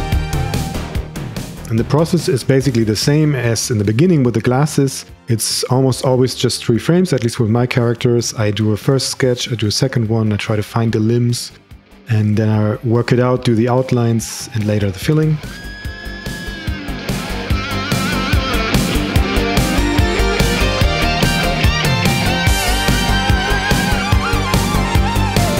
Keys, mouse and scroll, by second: 2.6 click, 3.2 click, 3.6 click, 3.9 click, 5.5 click, 5.7 click, 6.6 click, 7.0 click, 7.2 click, 7.5 Right, 7.5 Left, 7.7 Right, 7.7 Left, 8.0 Right, 8.1 Right, 8.1 Left, 8.3 click, 8.6 click, 9.0 click, 9.7 click, 10.1 click, 10.5 click, 12.2 click, 14.2 click, 14.7 click, 17.2 click, 17.5 right click, 20.0 click.